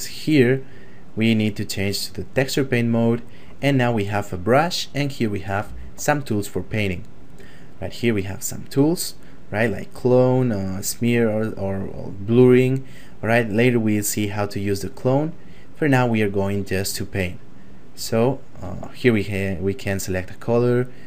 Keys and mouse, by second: 2.4 click, 5.4 click, 15.5 click, 17.2 ctrl+middle click, 19.2 click.